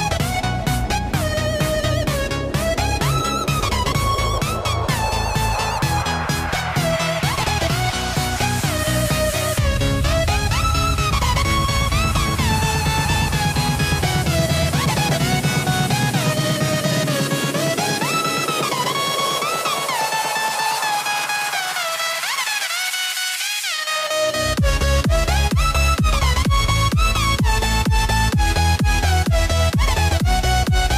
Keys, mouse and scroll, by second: 0.4 BackSpace, 4.4-6.1 drag, 6.1 KP_0, 6.2 KP_0, 11.7 click, 12.9 click, 15.9-18.6 drag, 19.4-24.3 drag, 27.7-30.2 drag.